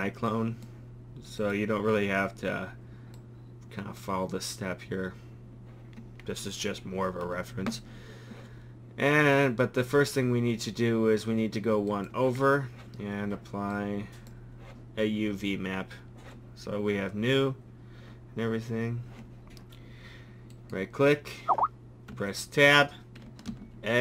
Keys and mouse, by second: 7.6 click, 7.6 a, 11.9-15.7 drag, 22.1 Tab, 23.5 a.